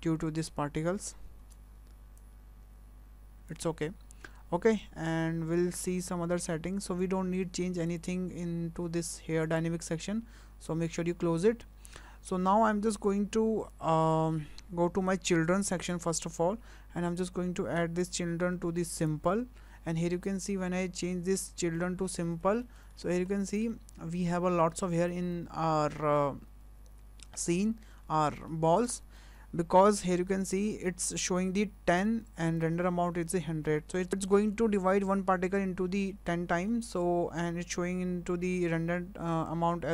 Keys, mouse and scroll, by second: 1.4 space, 2.2 click, 5.1 scroll down 3, 5.9 click, 7.9 click, 9.4 click, 15.9 click, 20.1-20.5 scroll up 2, 20.5 shift+middle click, 22.2 shift+middle click, 22.6 middle click, 22.9 scroll up 2, 23.3 shift+middle click, 23.7 middle click, 26.0 shift+middle click, 28.2 scroll up 2, 28.5 shift+middle click.